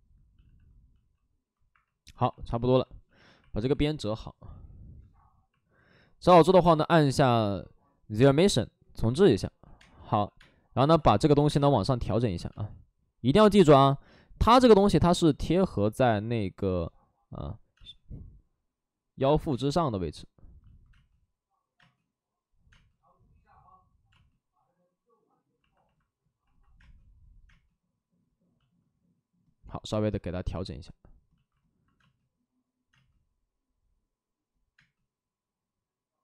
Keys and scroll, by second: 0.3 shift+f, 1.6 Escape, 1.6 shift+g, 2.3 alt+s, 3.0 shift+f, 4.2 ctrl+d, 4.9 Escape, 8.1 Escape, 8.8 ctrl+d, 9.7 ctrl+d, 9.7-11.8 typing, 16.4 space, 18.2 space, 19.4 space, 20.8 space, 21.7 space, 22.6 space, 24.0 space, 26.7 space, 27.4 space, 31.9 space, 32.8 space, 34.7 space.